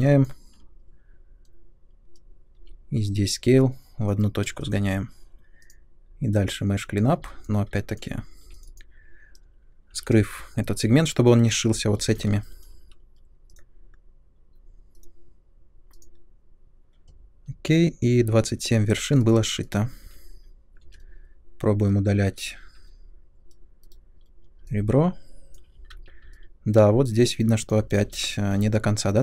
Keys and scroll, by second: 2.5 r, 4.4 space, 8.4 3, 9.9 h, 20.0 2, 20.8 3, 22.7 2, 23.8 Delete, 25.8 ctrl+z.